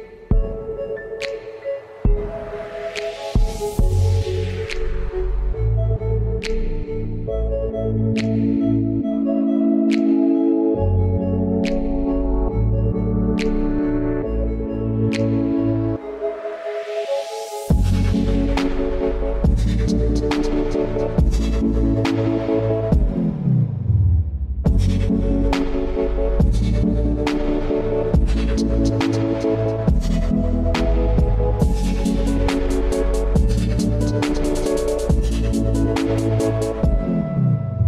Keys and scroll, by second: 0.1 |, 2.2 shift+f, 2.6 shift+t, 30.0-30.9 typing.